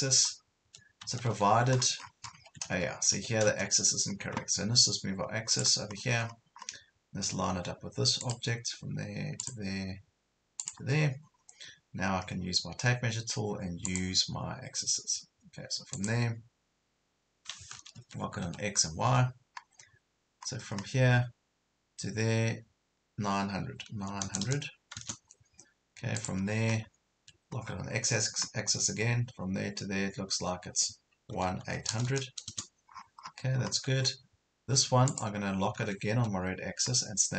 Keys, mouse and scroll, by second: 1.8 scroll down 1, 2.3 Escape, 4.1 scroll up 1, 5.5 click, 6.0 scroll down 1, 6.2 scroll up 1, 8.3 click, 11.3 scroll down 1, 12.0 scroll up 1, 13.9 click, 17.9 Right, 18.4-19.1 typing, 20.5 scroll up 1, 24.0 KP_9, 26.2 click, 27.2 typing, 31.3 KP_1, 31.7 KP_8, 32.9 scroll down 1, 35.1 click, 36.1 Right.